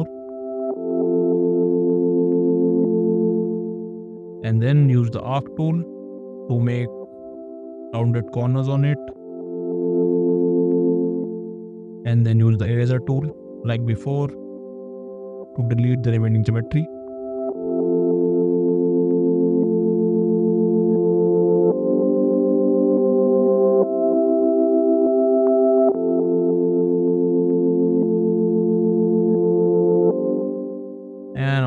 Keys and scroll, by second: 0.3 space, 11.7 e, 28.2 e.